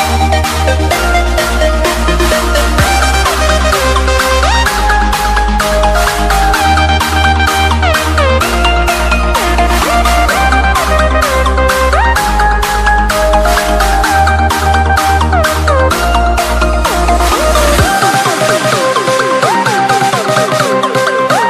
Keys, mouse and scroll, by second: 0.0-2.1 typing, 2.7 click, 5.1 right click, 5.5 click, 5.8 alt+Tab, 6.3 v, 6.5 alt+scroll down 2, 7.0 t, 7.3 click, 8.5 Return, 8.9 scroll up 1, 9.5 click, 10.3 Delete, 10.8 scroll down 1, 10.9 ctrl+d, 11.4 click, 17.2 Delete, 17.6 click, 18.1 click, 21.0 Return, 21.3 Up.